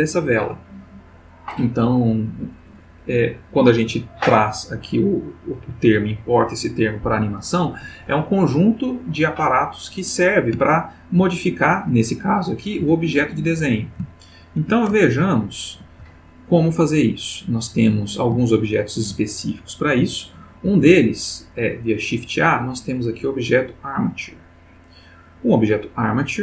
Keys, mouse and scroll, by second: 10.9-11.4 ctrl+middle drag, 12.1 click, 12.8 g, 13.6 Escape, 14.1-14.8 shift+middle drag, 15.1 ctrl+shift+middle click, 16.1-16.7 ctrl+shift+middle drag, 18.4-19.1 shift+middle drag, 20.6 shift+a.